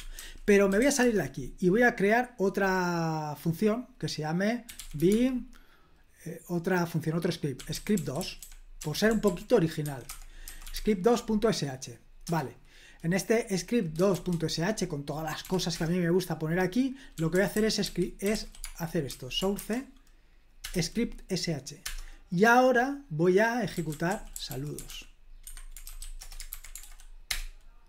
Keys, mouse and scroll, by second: 0.2-1.3 typing, 4.4-5.5 typing, 7.3-11.2 typing, 12.2 Return, 14.1 shift+g, 15.4 o, 15.7 Return, 16.9-19.6 typing, 20.7 Return, 21.8 Return, 23.5-26.3 typing, 25.4 Escape, 26.5 super+h, 26.8 ctrl+p, 27.3 Return.